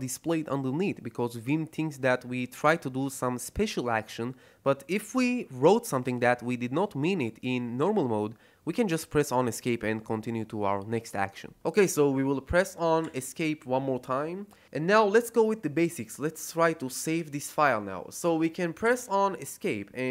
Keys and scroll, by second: 13.0 Escape, 18.8 Escape.